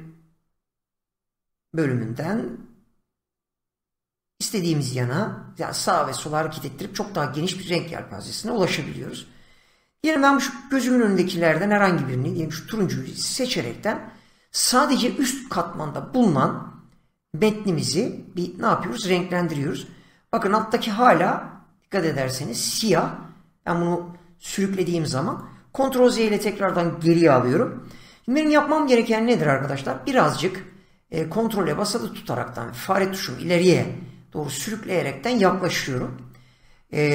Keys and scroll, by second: 26.0 ctrl+z.